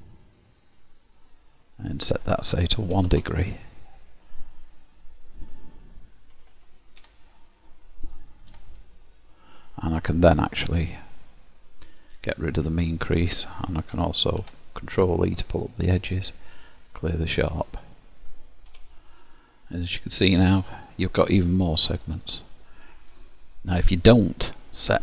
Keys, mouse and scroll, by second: 1.0-1.4 scroll down 1, 2.1 click, 6.6 alt+h, 7.1 Tab, 8.2 click, 8.6 Tab, 9.2-9.6 scroll up 2, 12.2 click, 14.4 ctrl+e, 17.7 click, 18.8 1, 19.5 middle click, 23.4-24.6 scroll up 1, 24.6-25.0 scroll down 4.